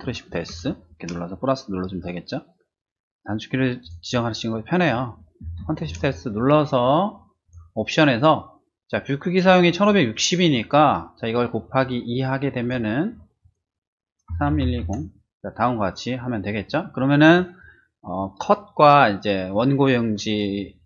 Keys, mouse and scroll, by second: 3.8 click, 7.4 click, 9.4 click, 12.6 click, 13.4 click, 14.3-14.8 typing.